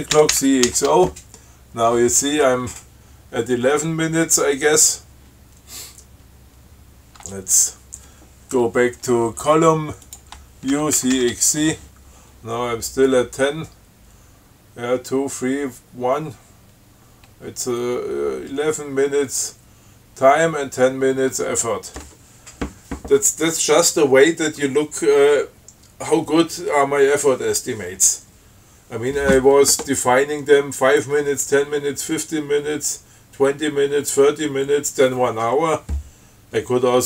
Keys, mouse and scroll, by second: 0.4 ctrl+c, 0.6 ctrl+x, 1.0 ctrl+o, 10.4 click, 11.0 ctrl+c, 11.2 ctrl+x, 11.4 ctrl+c.